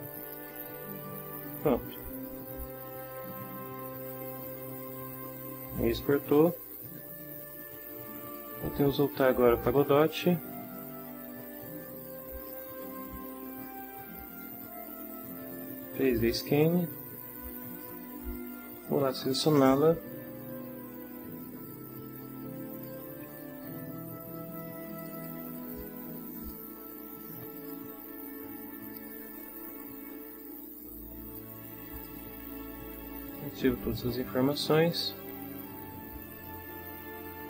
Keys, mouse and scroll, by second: 0.2 click, 1.5 click, 9.0 click, 12.8 click, 16.3 click, 17.7 click, 22.8 click, 23.7 h, 24.9 click, 26.4 click, 27.5 click, 28.8 click, 31.9 click, 33.3-37.4 drag.